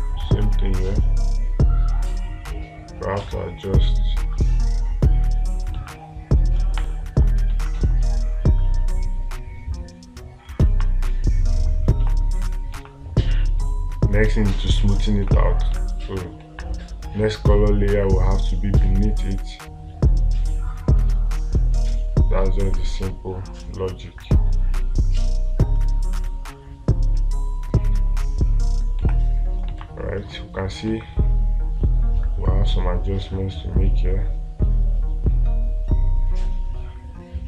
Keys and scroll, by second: 6.2 space, 11.2 space, 13.2 space, 14.8 space, 16.9 space, 29.4 space, 30.3 space.